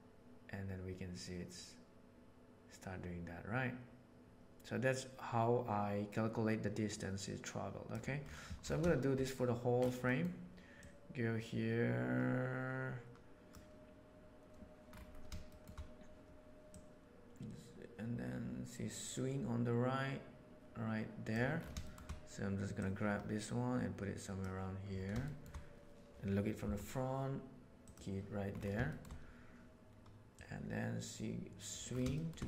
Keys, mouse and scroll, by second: 6.3-7.9 drag, 10.8-13.5 drag, 15.5 shift+middle click, 16.7-17.5 drag, 20.2 click, 21.8 shift+middle drag, 22.7-24.4 drag, 25.2 shift+drag, 26.6 g, 28.8 shift+middle click, 30.3-31.7 right drag, 32.1 shift+middle click.